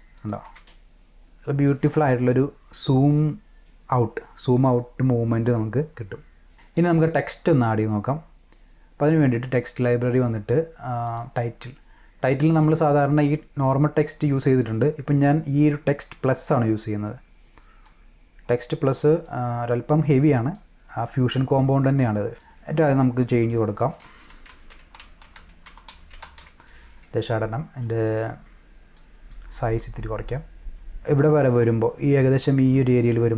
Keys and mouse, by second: 0.1 click, 0.4 space, 9.6 click, 11.0 click, 16.4-17.8 drag, 19.2-20.5 drag, 22.3 click, 23.5 click, 24.2-26.9 typing, 28.4 click, 29.7 click, 33.1-33.3 drag.